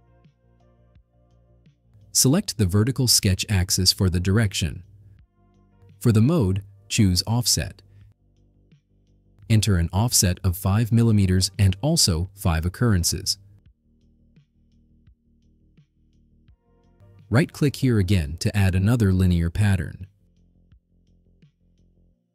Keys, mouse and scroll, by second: 1.2 click, 2.5 click, 4.8 click, 5.8 click, 9.1 click, 9.9 click, 11.1 5, 11.4 click, 13.1 click, 13.5 5, 14.6 click, 17.6 right click, 21.8 click.